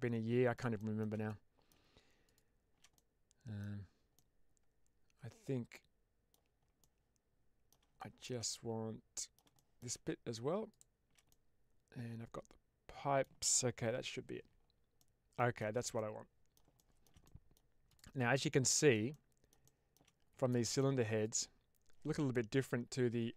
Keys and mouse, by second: 0.7 shift+middle click, 1.2 middle click, 2.1 shift+click, 2.8-3.5 middle drag, 4.1-6.2 middle drag, 6.7-7.6 middle drag, 7.9 shift+middle drag, 8.4-9.2 middle drag, 9.4 shift+middle drag, 10.6 shift+click, 11.2-13.1 middle drag, 14.9 middle click, 15.5-15.8 shift+middle drag, 15.8-16.4 middle drag, 16.7 shift+middle drag, 17.1 middle click, 18.2-18.6 shift+middle drag, 19.0-19.4 middle drag, 19.6-19.9 shift+middle drag, 20.4 middle click, 21.1 click.